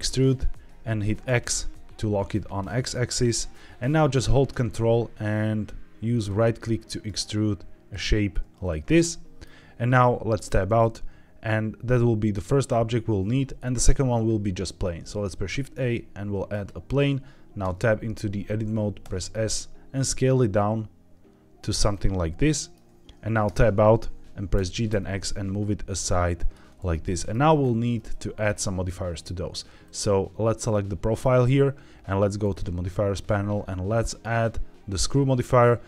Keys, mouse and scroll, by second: 1.2 x, 3.2 click, 6.1 ctrl+right click, 7.0 ctrl+right click, 7.8 ctrl+right click, 8.8 middle click, 10.3 Tab, 15.0 shift+a, 17.6 Tab, 19.0 s, 21.5 click, 21.8 middle click, 23.4 Tab, 24.5 g, 24.8 x, 26.3 click, 26.8-27.2 middle drag, 27.5 scroll up 2, 28.0-28.4 shift+middle drag, 29.8 click, 32.3 click, 34.0-35.8 drag.